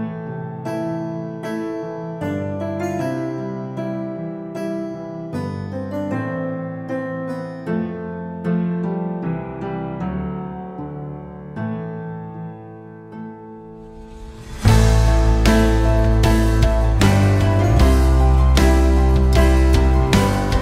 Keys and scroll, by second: 14.7 ctrl+s, 17.1 F4, 19.3 F4.